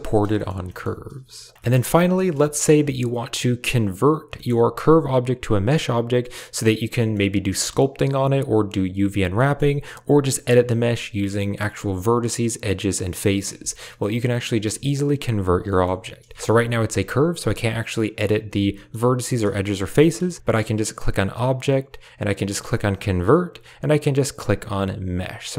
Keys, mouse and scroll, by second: 0.2 shift+middle click, 0.5 shift+click, 1.5 shift+click, 2.0 shift+drag, 4.2 shift+drag, 6.2 drag, 6.8 drag, 9.2 click, 11.2 click, 13.7 click, 14.1 click, 14.6 shift+drag, 15.5 shift+drag, 16.2 Tab, 16.6 g, 18.3 Tab, 18.6 drag, 19.4 shift+click, 20.1 shift+drag, 21.3-25.1 drag.